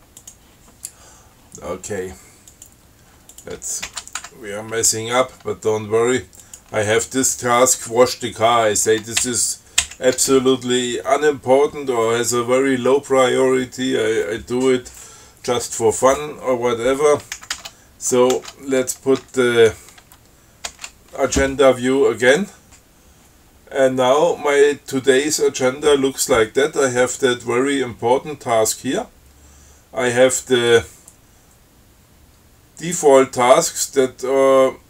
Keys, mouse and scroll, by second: 0.5 click, 2.8 click, 3.6 ctrl+click, 4.1 ctrl+x, 4.5 ctrl+1, 6.7 click, 9.5 shift+Down, 17.6 ctrl+x, 17.8 ctrl+s, 18.6 ctrl+c, 19.5 a, 21.0 shift+d.